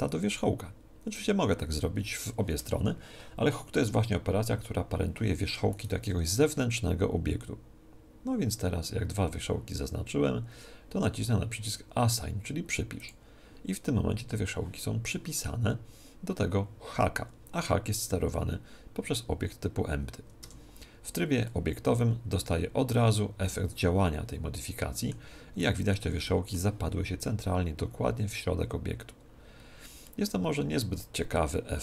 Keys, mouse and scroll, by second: 5.7 right click, 13.1 click, 20.4 Tab, 21.5-23.3 middle drag, 25.7-31.8 middle drag.